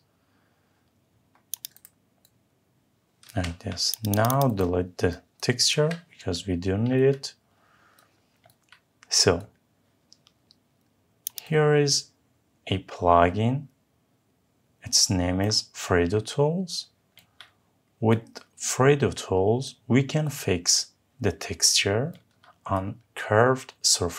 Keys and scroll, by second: 3.1 Escape, 5.5 Delete.